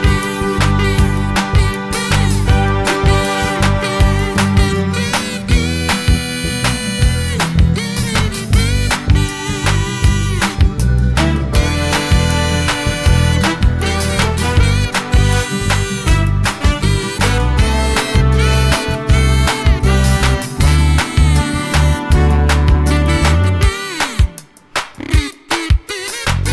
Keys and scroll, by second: 5.2 super+c, 5.5 super+v.